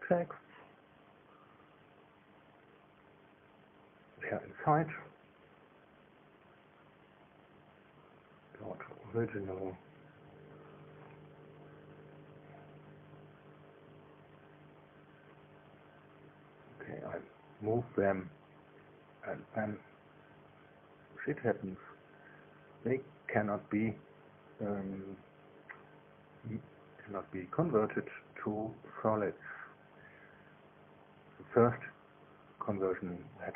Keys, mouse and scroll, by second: 0.6 click, 2.7-4.1 middle drag, 5.5 click, 7.1 click, 8.1 click, 9.1 click, 10.6-12.1 middle drag, 13.2 1, 13.9 3, 14.5 1, 18.7 KP_2, 21.5 click, 22.4 shift+click, 28.0 click.